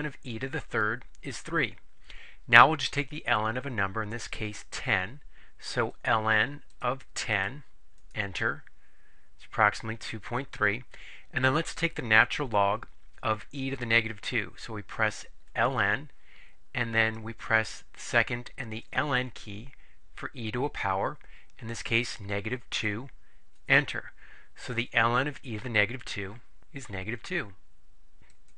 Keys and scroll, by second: 6.8 1, 7.4 0, 8.1 Return, 22.8 2, 23.7 Return.